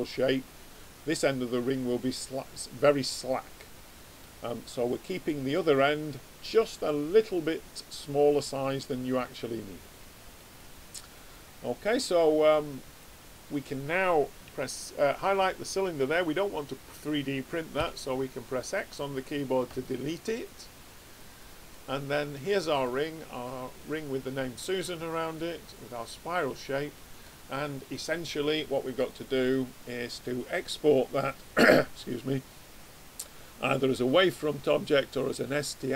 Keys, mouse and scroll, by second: 2.9-8.3 middle drag, 12.1 click, 17.7 x, 21.2 click, 21.7-24.6 middle drag, 21.7 right click, 22.7-23.9 right drag, 29.0 click.